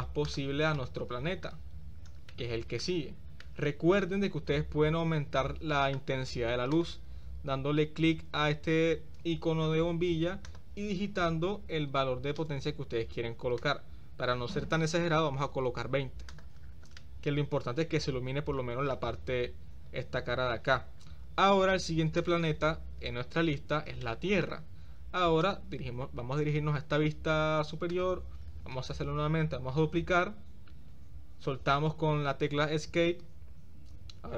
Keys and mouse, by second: 0.8-1.5 middle drag, 2.3-2.9 middle drag, 3.5-4.1 middle drag, 6.8 click, 10.5-12.7 drag, 11.9 0, 13.7-15.7 drag, 17.1-19.0 middle drag, 24.1 middle click, 30.3 shift+d.